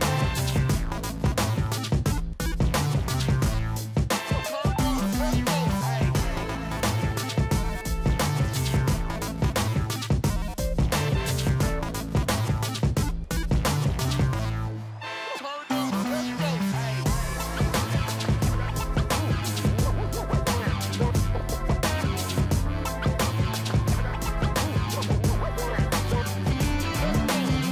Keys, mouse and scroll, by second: 0.0 Left, 0.0 Up, 0.2 Down, 0.3 Left, 0.5 Up, 0.6 Right, 0.8 Down, 1.4 ctrl+j, 1.8 Up, 1.9 Left, 2.0 Down, 2.1 Left, 2.5 scroll down 1, 2.9 ctrl+j, 3.3 Left, 3.3 Down, 3.6 Left, 3.8 Down, 3.9 Right, 4.1 Left, 4.6 ctrl+j, 5.0 Left, 5.2 Down, 5.3 Left, 5.3 Down, 5.4 Down, 5.5 Down, 5.6 Left, 5.8 Down, 6.5 ctrl+j, 6.9 Left, 7.0 Down, 7.3 Down, 7.4 Down, 7.4 Down, 7.7-8.1 scroll down 3, 8.4 Left, 8.5 Left, 8.7 Down, 8.8 Left, 8.9 Down, 9.0 Down, 9.1 Left, 9.1 Right, 9.2 Down, 9.3 Down, 9.8 ctrl+j, 10.2-10.9 Down, 10.2 Left, 11.1 Up, 11.5-11.9 scroll down 1, 11.9 ctrl+j, 12.3 Left, 12.4 Down, 12.8 Down, 13.1 Down, 13.1 Down, 13.2 Down, 13.4 Up, 14.4 ctrl+j, 15.3 ctrl+click, 17.1 scroll down 2, 17.4 ctrl+j, 18.2 ctrl+click, 19.1 ctrl+j, 19.7 ctrl+click, 20.7 ctrl+click, 21.4-21.7 scroll down 3, 22.3 ctrl+click, 23.2 ctrl+j, 23.7 ctrl+click, 25.3 ctrl+j, 25.9 ctrl+click, 26.7 scroll down 1, 27.0 ctrl+j.